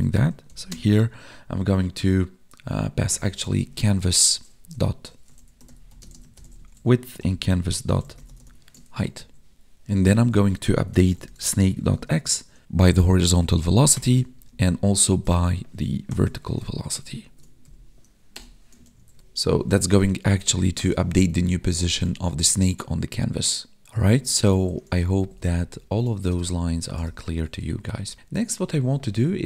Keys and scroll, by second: 0.6 space, 5.9 space, 8.8 ctrl+s, 9.1 Right, 11.9 space, 14.3 Up, 14.6 alt+shift+Down, 15.0 ctrl+Right, 16.6 ctrl+Right, 17.6 Left, 18.8 ctrl+s, 19.2 Right, 20.0 Up, 20.9 ctrl+s, 21.4 ctrl+Down, 23.9 Up, 24.9 ctrl+Left, 26.6 Down, 27.2 ctrl+s, 27.6 ctrl+Down.